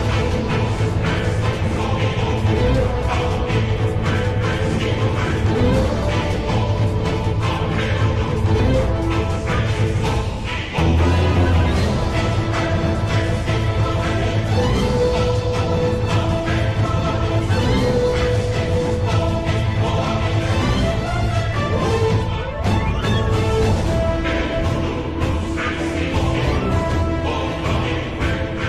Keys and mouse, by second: 0.0 KP_7, 1.7 Tab, 7.3 Tab, 9.3 z, 10.3-11.4 drag, 12.7 shift+middle click, 16.0 g, 21.0 ctrl+KP_Add, 23.2 ctrl+KP_Subtract, 26.5 r.